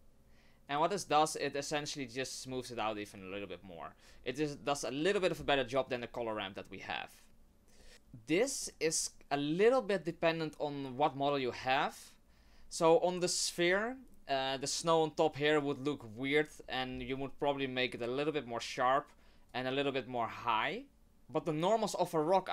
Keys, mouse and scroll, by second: 0.7 click, 5.9 click, 8.6 middle click, 9.0-9.7 scroll down 1, 9.7 click, 16.9-17.8 scroll up 1, 17.8 click, 17.8-19.7 scroll up 4, 20.2 click.